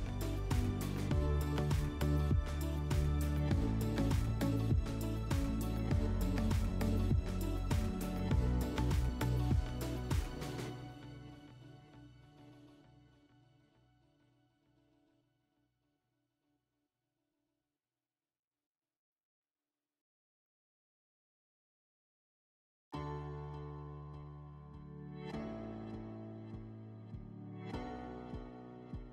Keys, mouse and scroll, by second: 1.0 click, 2.4 click, 6.0 click, 6.9 click, 12.2 click, 15.9 click, 17.5 click, 18.4 click, 22.2 click, 24.5 w, 25.9 click, 28.4 click.